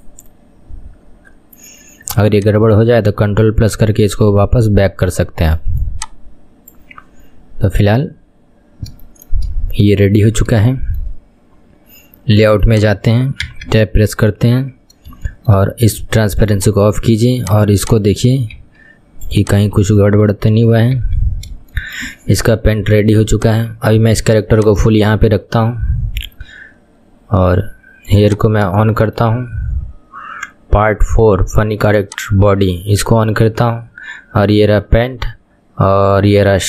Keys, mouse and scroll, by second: 2.4-5.5 ctrl+drag, 6.0-8.3 drag, 8.3-8.8 scroll up 5, 8.8-9.2 scroll down 5, 9.2-12.8 shift+middle drag, 12.8 click, 13.6 Tab, 15.2 scroll up 2, 15.4-16.7 shift+middle drag, 16.7 click, 18.8 ctrl+KP_1, 19.5 click, 19.9 KP_1, 20.3-21.1 scroll down 3, 21.1 Tab, 21.9-28.4 shift+middle drag, 28.4 click, 29.1-32.0 shift+middle drag, 32.0 click.